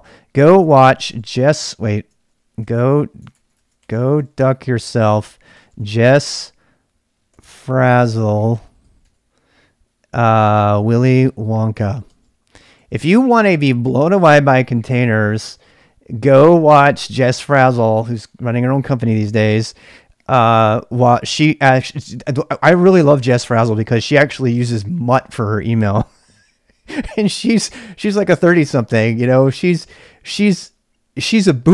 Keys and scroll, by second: 0.4-9.3 typing, 10.5-13.3 typing, 15.1-17.1 typing.